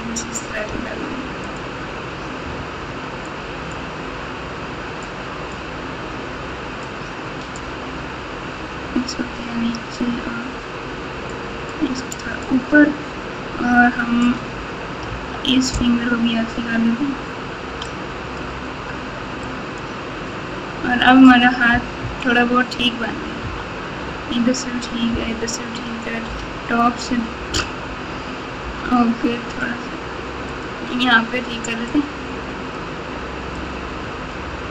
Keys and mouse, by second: 0.6 f, 3.2-4.6 drag, 5.0 click, 6.9 click, 11.3 click, 12.1 click, 15.0 KP_8, 17.8 click, 19.4 click, 22.0 KP_1, 23.4 KP_9, 25.0 KP_9, 26.2 KP_7, 28.5 f, 31.8 click, 33.5 click.